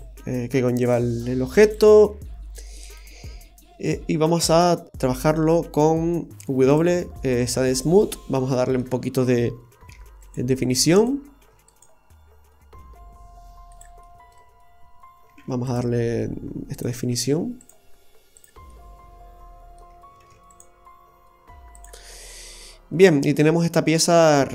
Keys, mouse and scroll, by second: 0.8 click, 2.8 click, 3.5-4.1 scroll up 1, 5.8 Tab, 6.1 w, 7.3 scroll up 1, 7.5 Tab, 7.9-8.2 scroll down 1, 8.5 middle click, 8.5 scroll down 2, 10.0 ctrl+r, 14.0 middle click, 18.7 middle click, 20.3 ctrl+r, 22.1-22.4 scroll down 3, 22.3 middle click.